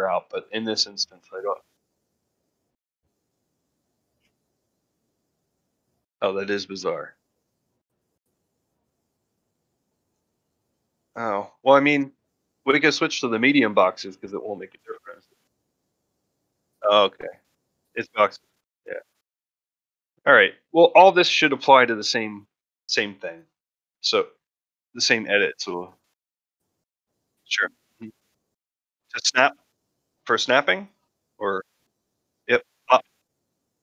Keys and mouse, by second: 22.9-24.1 middle drag, 24.6-24.9 middle drag, 25.2 shift+middle drag, 25.5 middle drag, 25.9 shift+middle drag, 30.0-30.3 middle drag, 30.9-31.3 shift+middle drag, 31.5 ctrl+middle drag, 32.0 shift+middle drag.